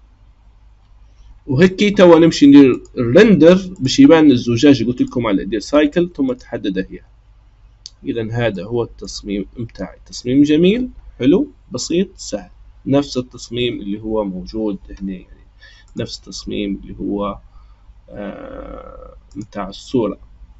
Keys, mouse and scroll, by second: 0.0-0.4 scroll down 3, 2.7 click, 3.7-6.7 drag, 8.0-8.4 scroll up 1, 8.5 middle click, 9.3-11.1 scroll up 1, 11.1-12.2 scroll up 1, 15.8-18.9 drag.